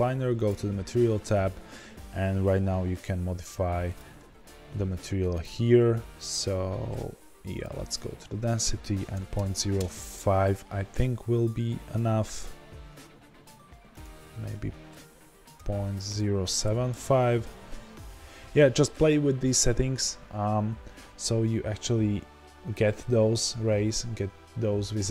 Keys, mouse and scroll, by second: 0.3-25.1 drag, 9.8 KP_Enter, 17.1 KP_Enter.